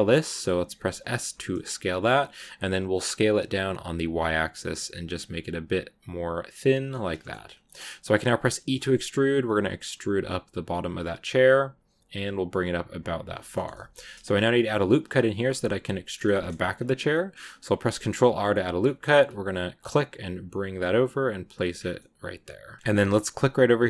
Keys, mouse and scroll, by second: 6.8 middle click, 7.3 scroll up 2, 7.5 middle click, 8.4 e, 13.4 shift+middle click, 13.9-16.0 scroll up 2, 13.9 middle click, 16.0 scroll down 2, 16.2 shift+middle click, 16.4-17.0 scroll up 1, 17.0-21.6 middle drag, 21.6 scroll down 6, 21.8 middle click, 22.8-23.8 scroll up 2.